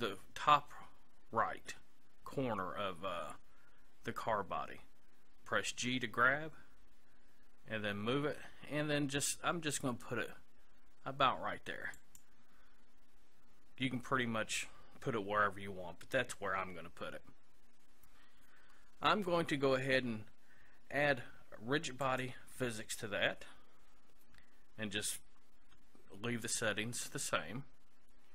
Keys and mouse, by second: 5.7 g, 12.2-13.9 drag, 22.0-23.9 drag.